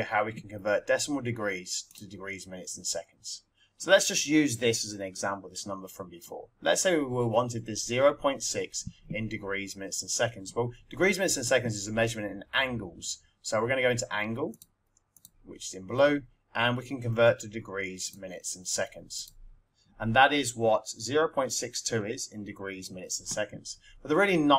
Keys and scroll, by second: 18.0 4, 19.2 Return.